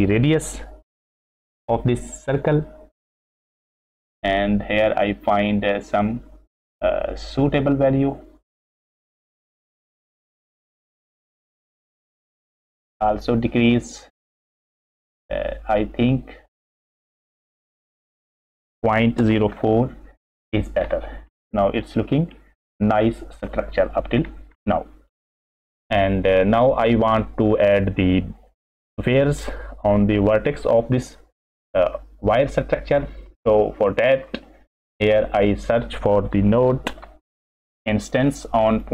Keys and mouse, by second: 3.5 shift+click, 4.4-10.4 shift+middle drag, 14.0 shift+middle click, 14.3-17.1 shift+drag, 17.3-20.3 drag, 21.3 click, 21.4 middle click, 22.3-23.1 middle drag, 23.5-24.0 middle drag, 24.6 middle click, 26.3 middle click, 30.8-32.3 middle drag, 33.1 middle click, 33.9 middle click, 34.4 middle click, 35.4 middle click, 35.9 click, 36.9 shift+a.